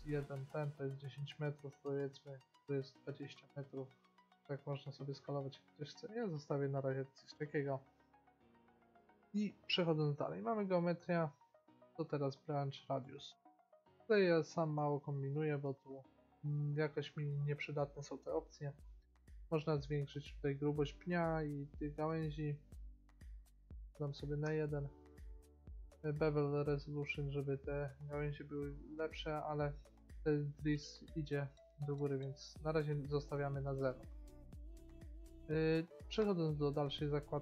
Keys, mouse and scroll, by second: 1.9-3.7 drag, 5.6-7.4 drag, 9.4-10.3 scroll down 1, 10.3-12.3 drag, 19.2-21.1 drag, 22.8-25.5 drag, 25.5-26.6 middle drag, 26.6-28.5 drag, 31.9-33.8 drag, 34.0-36.3 middle drag, 36.3-37.4 drag.